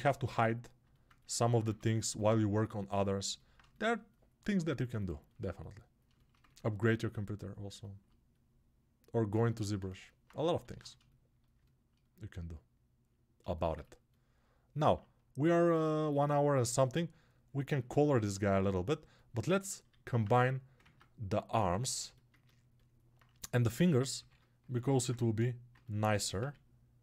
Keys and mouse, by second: 4.5 alt+shift+right click, 4.7-21.4 alt+drag, 20.9 ctrl+Tab, 21.4-27.0 shift+middle drag.